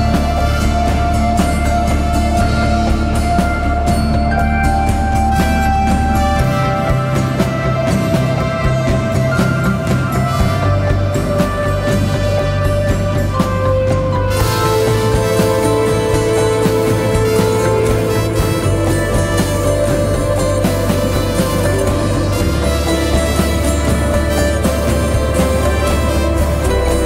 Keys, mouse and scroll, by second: 12.5 Return, 13.6 Return, 13.7 ctrl+t, 14.7 alt+shift+click, 18.8 Return, 26.1 double click.